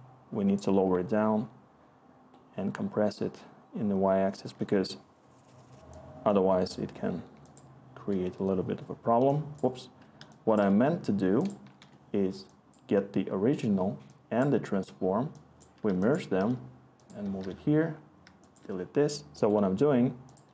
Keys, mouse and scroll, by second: 8.1 Delete, 11.8 Delete, 18.2 y.